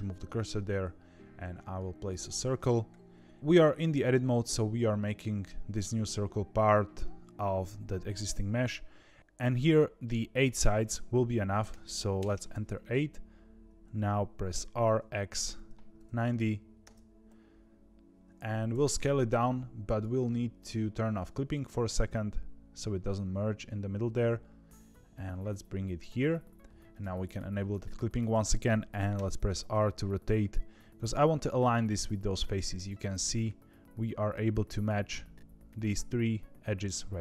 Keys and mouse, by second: 0.3 shift+a, 10.3-12.6 drag, 18.7 s, 21.8 s, 27.7 shift+middle click, 29.1 r.